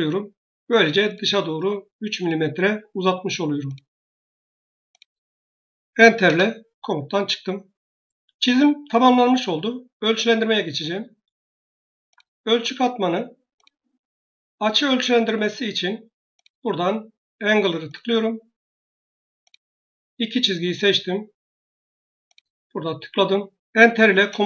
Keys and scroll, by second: 24.0 Return.